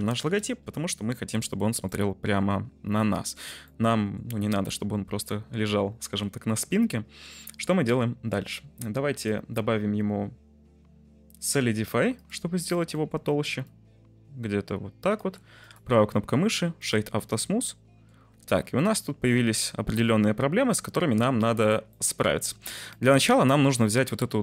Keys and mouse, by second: 0.3 Return, 1.8-2.3 middle drag, 2.9-3.3 middle drag, 3.3 r, 3.7-4.2 middle drag, 9.1-12.2 drag, 12.9 middle click, 13.7-15.1 shift+drag, 15.7-16.8 drag, 17.5-18.1 middle drag, 18.3 Tab, 18.8-19.9 middle drag, 20.9 Tab, 21.9 middle click, 22.4 Tab, 22.8 middle click, 23.8 middle click.